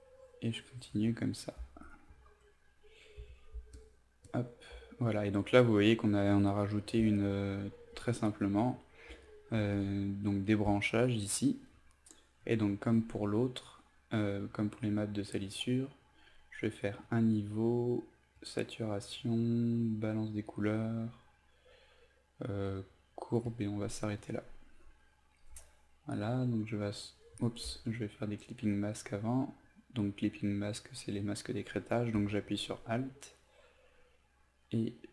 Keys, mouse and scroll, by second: 3.2 z, 3.7 alt+click, 4.3 alt+click, 7.2-27.6 drag, 28.2 alt+click, 28.9 alt+click, 29.6 alt+click, 30.5 alt+click, 31.2 alt+click, 32.5-35.1 drag.